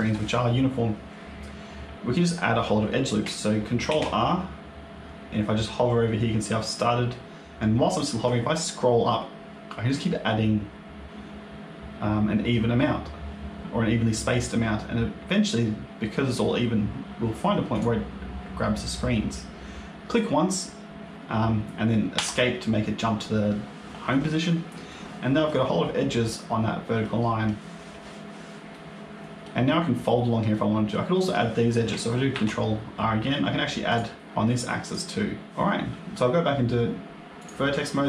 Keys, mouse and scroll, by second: 3.8 ctrl+r, 24.8 middle click, 26.9 middle click, 28.6 middle click, 30.4 middle click, 32.2 ctrl+r, 34.2 ctrl+z, 35.5 middle click, 37.3 click.